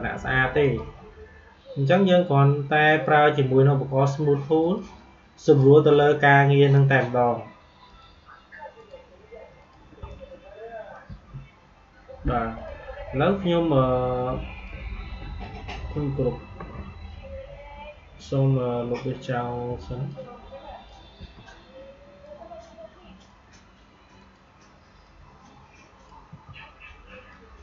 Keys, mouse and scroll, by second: 0.5 click, 1.8 right click, 2.8 click, 6.6 right click, 7.8 click, 10.7 Delete, 12.5-19.6 drag, 19.6 Delete, 20.0 click, 21.1 Delete, 22.1-26.2 drag, 26.2 Delete, 27.2-27.6 drag.